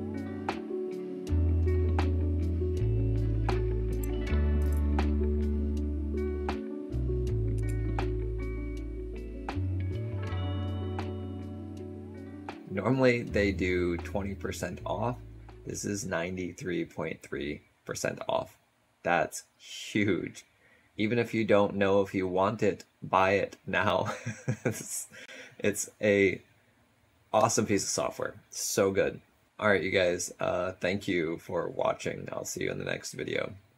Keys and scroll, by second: 3.9 shift+w, 4.5 shift+n.